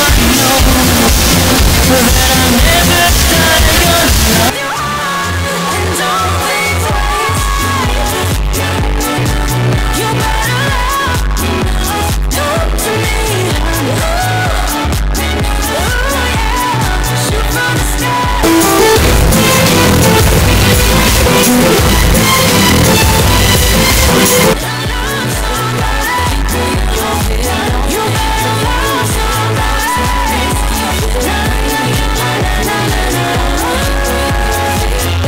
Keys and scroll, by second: 4.5 Page_Down, 24.7 Page_Down.